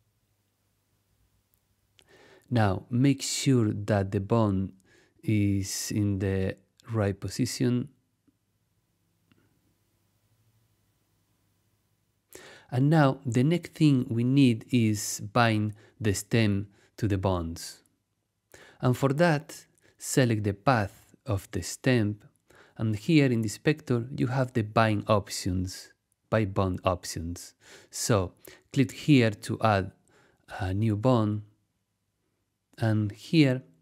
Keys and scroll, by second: 1.1 Escape.